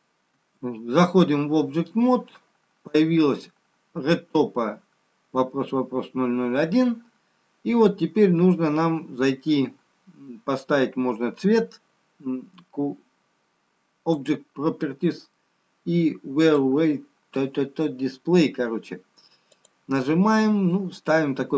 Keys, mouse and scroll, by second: 1.1 Tab, 1.1-3.1 scroll down 1, 15.0 click, 15.6-16.4 scroll down 4, 16.4-17.2 scroll down 1, 17.2 click, 18.8-19.1 scroll down 1, 19.5-20.4 scroll down 5, 20.4 click.